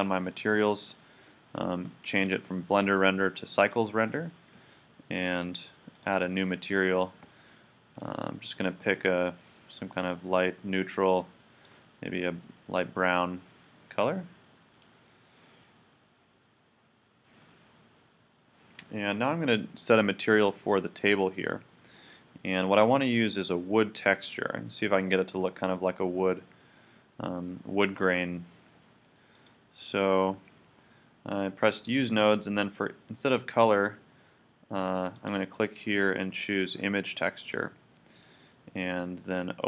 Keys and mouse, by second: 0.3-4.0 drag, 5.9-7.7 drag, 8.0-9.7 drag, 18.7-24.6 right drag, 29.3-35.1 drag, 35.1-37.5 drag, 39.6 click.